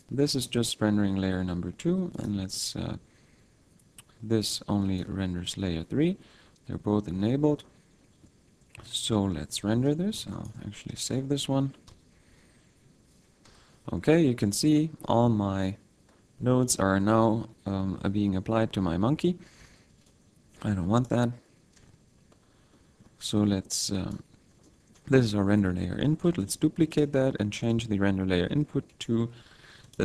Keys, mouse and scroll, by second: 0.3 click, 2.1 click, 4.8 click, 7.3-8.0 scroll down 1, 8.0 middle click, 8.0-9.1 scroll down 12, 8.7-10.1 scroll up 3, 10.1 ctrl+s, 11.9 F12, 15.0-15.5 scroll up 1, 15.5-16.0 scroll down 1, 16.0-16.6 scroll down 1, 16.6 scroll down 1, 16.7 middle click, 19.6 a, 19.9 b, 22.0 x, 22.5-23.3 scroll up 5, 22.7 middle click, 23.8 click, 24.3-24.6 scroll up 3, 24.6 middle click, 25.0-25.5 scroll up 1, 26.4 shift+d, 27.0 click, 27.6 click, 29.8 click.